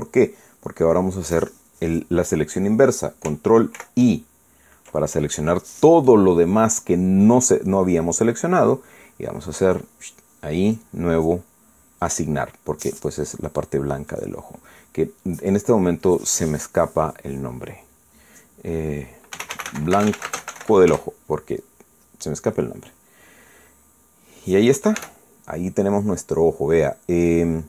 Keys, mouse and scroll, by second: 4.8 ctrl+i, 6.9-7.5 scroll down 2, 7.5 scroll up 2, 7.7-8.0 scroll down 2, 8.0 scroll up 2, 8.2 scroll down 2, 10.7 click, 11.7 click, 13.0 click, 15.1 click, 20.1-21.9 typing, 21.9 Return, 24.5-24.9 scroll down 2, 24.9-26.0 scroll up 4, 26.0 Tab, 26.0 scroll up 1, 27.3-27.6 scroll up 1.